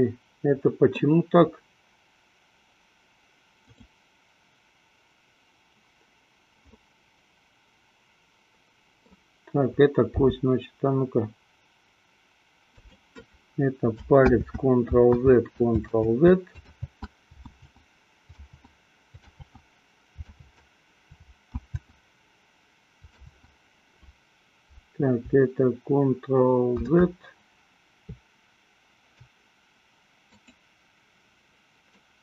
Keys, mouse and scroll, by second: 3.7 click, 6.9-9.4 middle drag, 10.5 g, 13.2 click, 15.3 ctrl+z, 16.2 ctrl+z, 26.8 shift+z, 30.7 click.